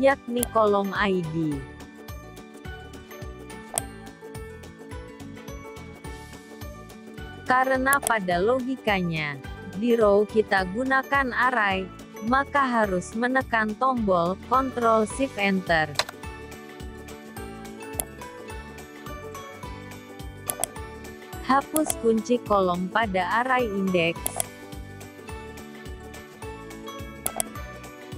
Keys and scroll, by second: 5.6 F4, 14.3 ctrl+shift+Return.